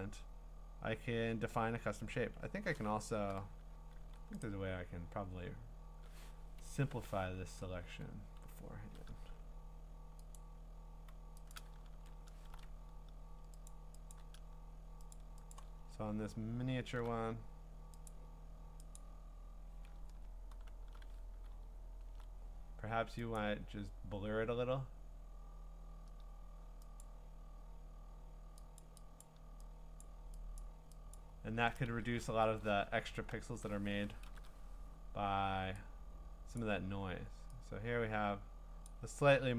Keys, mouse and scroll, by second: 2.3 Escape, 4.0 a, 4.4-6.8 right drag, 6.6 Escape, 7.5 ctrl+z, 10.4-11.6 drag, 11.9 ctrl+d, 13.7 click, 14.1 click, 15.1 click, 15.5 click, 15.8-17.0 scroll, 18.1 click, 19.0 click, 20.0-20.7 scroll, 21.6-23.4 ctrl+scroll, 23.4 click, 27.0 click, 28.8 click, 29.2 click, 30.0 click, 30.6 click, 31.2 click, 31.9 Return, 32.6-33.5 scroll, 34.2 ctrl+i, 36.6 click, 38.8 click.